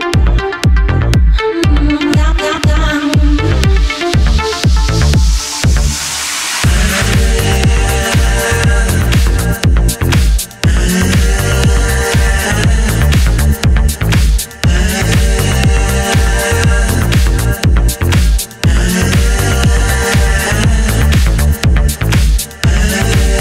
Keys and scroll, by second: 10.3 Up, 10.6 Down, 10.7 Up, 11.1 Down, 14.8 super+s, 20.8 BackSpace.